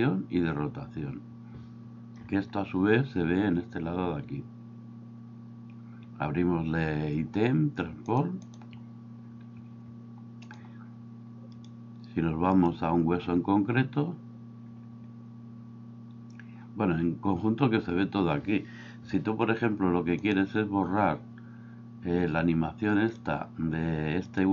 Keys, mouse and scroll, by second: 2.2 n, 8.5 click, 10.4 click.